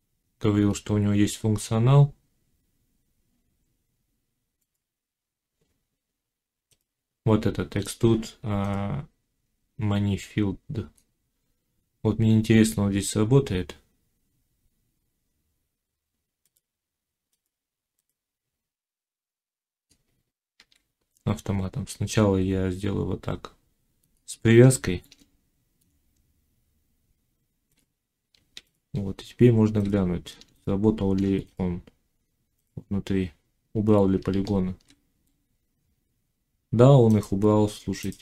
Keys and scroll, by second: 20.5 ctrl+z, 28.6 z, 34.0 Tab.